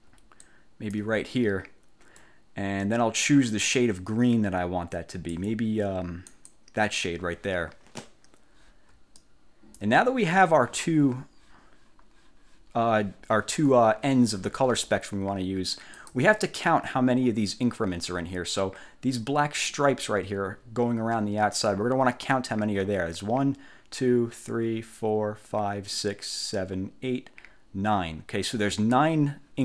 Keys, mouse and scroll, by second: 0.5 ctrl+click, 2.3-5.6 drag, 6.4 click, 9.3 ctrl+click, 16.1 click.